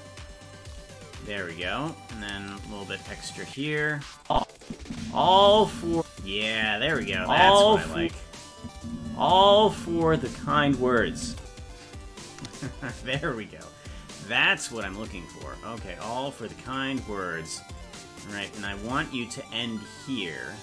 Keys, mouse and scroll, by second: 2.2-3.7 drag, 4.3 click, 4.7 click, 4.8 space, 6.6 click, 6.6 space, 6.9 space, 8.6 click, 8.8 space, 13.8-15.1 shift+drag, 15.3-16.5 drag, 17.8-19.5 drag, 20.3-20.6 drag.